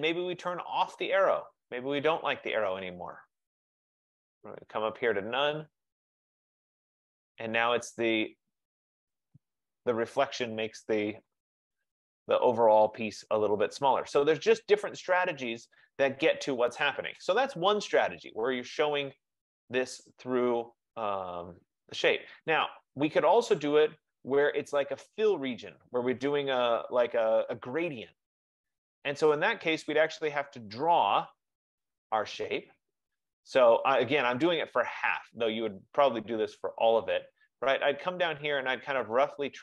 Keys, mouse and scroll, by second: 1.0 click, 2.7 click, 4.3 scroll, 4.9-5.5 scroll, 5.7 click, 6.9 click, 11.4 click, 22.7 click, 31.0 click, 36.5 F15, 37.1 click.